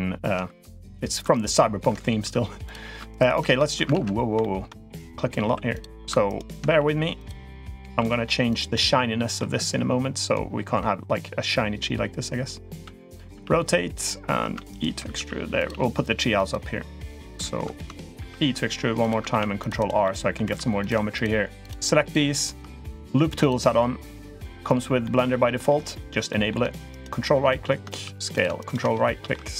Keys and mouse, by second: 0.3 s, 2.0 s, 3.8 ctrl+z, 4.2 shift+middle click, 5.2 s, 6.6 s, 7.8 s, 8.5 middle click, 12.5 g, 13.1 r, 15.0 s, 15.5 g, 18.0 e, 19.1 ctrl+r, 19.9 middle click, 20.3 3, 20.7 click, 21.0 shift+click, 21.4 shift+click, 21.9 shift+click, 24.9 middle click, 26.1 middle click, 27.8 s, 28.9 shift+middle click, 29.3 s.